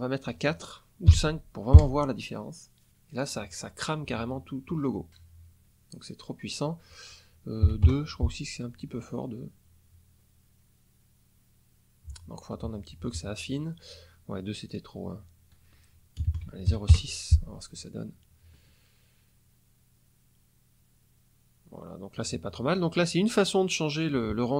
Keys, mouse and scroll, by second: 1.0 KP_5, 1.7 KP_Enter, 6.4 click, 7.6 KP_2, 7.8 KP_Enter, 14.6 click, 16.1 KP_0, 16.2 KP_Decimal, 16.6 KP_6, 16.9 KP_Enter.